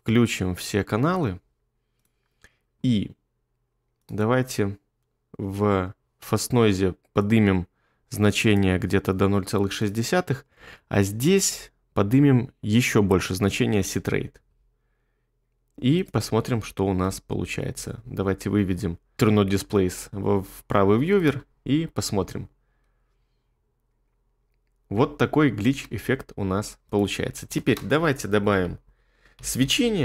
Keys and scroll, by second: 17.0 2, 25.6 space, 27.7-30.0 typing.